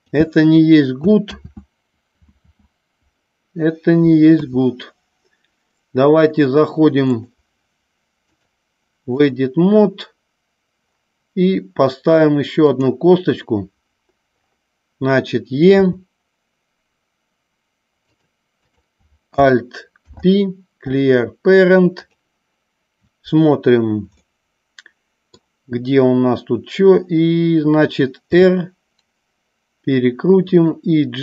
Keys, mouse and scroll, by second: 0.0 click, 1.5 ctrl+z, 2.5 ctrl+z, 4.4 KP_3, 7.3 click, 8.4-9.5 drag, 18.1 click, 20.0 alt+p, 24.3-25.6 middle drag, 28.4 r, 30.6 click.